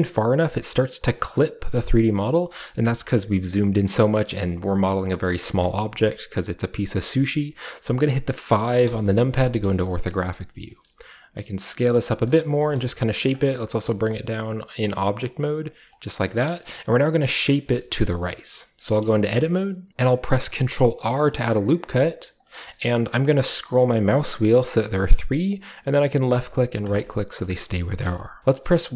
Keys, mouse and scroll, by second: 0.2 scroll up 1, 0.2 scroll down 1, 0.2-0.8 scroll up 1, 0.8-2.0 scroll up 1, 2.2-4.0 middle drag, 4.0-5.0 scroll down 1, 5.3-7.2 middle drag, 9.9 middle click, 10.1 middle click, 10.6 s, 10.9-11.9 middle drag, 11.8 click, 12.3-13.3 middle drag, 12.5 g, 12.8 z, 13.3 Tab, 13.6 g, 13.8 z, 15.7 click, 16.6-17.3 shift+scroll up 1, 17.3-18.3 shift+scroll up 1, 17.8 shift+middle drag, 18.3 middle click, 18.5 Tab, 19.0 middle click, 19.2-23.8 middle drag, 19.9 Tab, 21.0 ctrl+r, 23.8-26.4 scroll up 1, 26.4-27.4 drag, 27.4-28.9 middle drag.